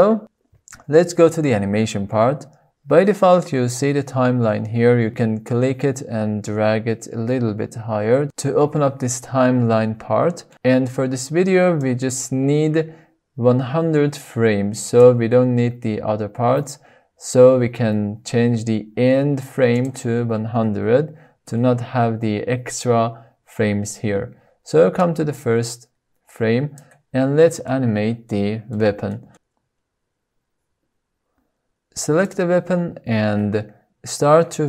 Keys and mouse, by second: 5.6-8.7 drag, 14.3-17.5 drag, 20.4-22.8 drag, 21.4 KP_0, 25.7-27.4 drag, 28.2-28.8 middle drag, 29.3-29.7 middle drag, 29.9 shift+click, 30.1 shift+middle click, 30.9 shift+click, 32.2 click, 34.5 r.